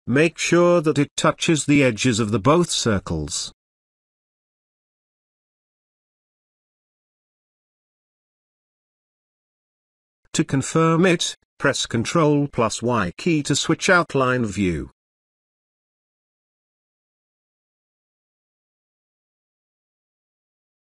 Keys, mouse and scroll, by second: 3.3 space, 3.5-4.4 ctrl+click, 4.5-5.2 ctrl+drag, 13.0 ctrl+y, 13.7 space, 14.1 ctrl+click, 17.0-17.5 ctrl+click.